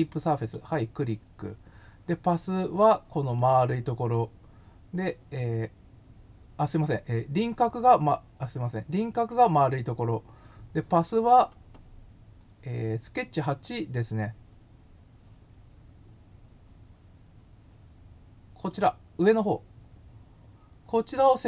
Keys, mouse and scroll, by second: 0.4 click, 3.3 click, 18.6 click.